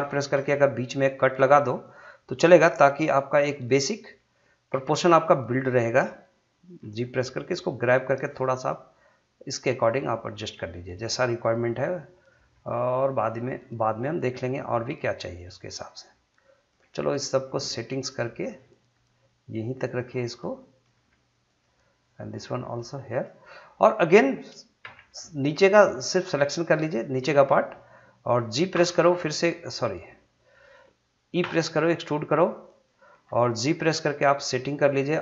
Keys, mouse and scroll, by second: 1.0 click, 5.2-6.8 drag, 6.8 g, 7.7 click, 8.4 g, 9.5 click, 10.4 g, 10.9 click, 12.5 g, 13.3 click, 14.9 g, 15.6 click, 16.8 g, 17.5 click, 18.4 g, 19.8 click, 21.0 g, 21.5 click, 22.4 g, 23.1 click, 24.8 3, 25.6-28.7 drag, 28.7 g, 30.6 click, 31.4 e, 32.7 click, 33.8 g, 35.1 click.